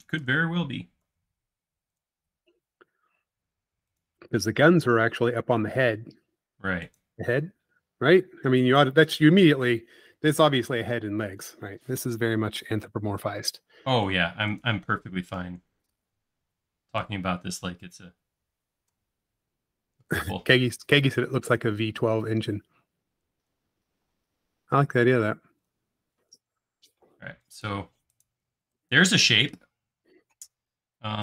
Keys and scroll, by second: 0.0 space, 1.1 c, 4.4 space, 6.0 m, 15.5 s, 22.2 space, 23.1 e, 24.1-24.8 typing, 26.0 typing, 29.5 space.